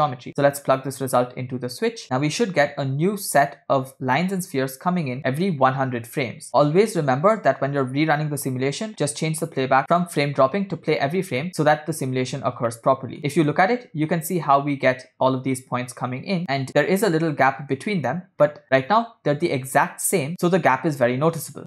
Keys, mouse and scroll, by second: 0.0 middle click, 0.9-2.0 drag, 9.5 drag, 10.0-11.0 drag, 11.5 middle click, 12.2 scroll down 2, 12.8-13.7 shift+middle drag, 16.4 space, 18.5-19.6 middle drag.